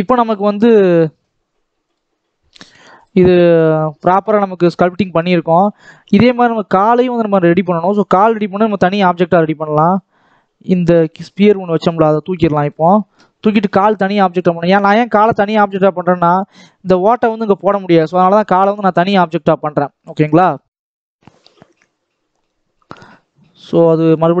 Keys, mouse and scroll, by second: 0.0-1.2 scroll up 1, 1.2-3.2 drag, 3.2 scroll up 2, 3.4 scroll down 2, 3.6-5.9 middle drag, 5.9-7.0 scroll down 2, 7.1-9.7 middle drag, 9.7 click, 10.8 click, 11.6 x, 11.8 scroll up 2, 12.1-14.3 middle drag, 14.3-14.7 scroll up 3, 14.7-24.4 middle drag.